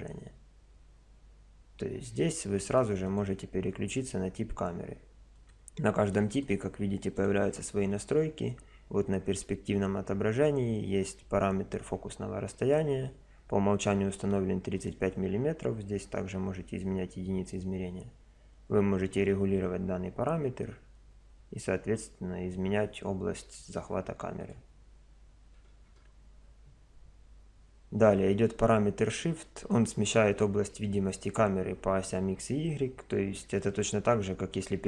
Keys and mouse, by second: 0.0 Escape, 3.1 click, 5.4-8.8 drag, 14.8 click, 17.5 click, 18.3-19.4 middle drag, 24.4 click.